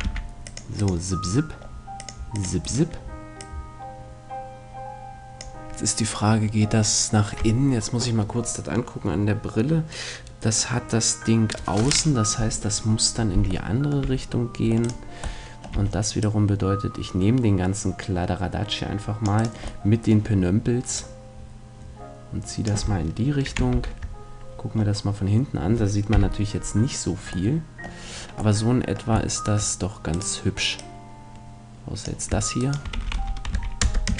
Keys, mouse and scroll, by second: 0.0 c, 2.7-4.4 right drag, 3.4-5.3 drag, 13.7-14.9 middle drag, 14.0 c, 14.9-16.7 right drag, 15.7 c, 19.4 right click, 19.9-20.9 middle drag, 20.9-22.6 drag, 20.9 right click, 21.1 middle click, 21.2 right click, 23.7 ctrl+KP_1, 24.7-26.7 middle drag, 26.1 KP_8, 27.5-29.3 middle drag, 29.6 middle click, 32.0 click, 32.7-34.1 right drag, 32.9 s.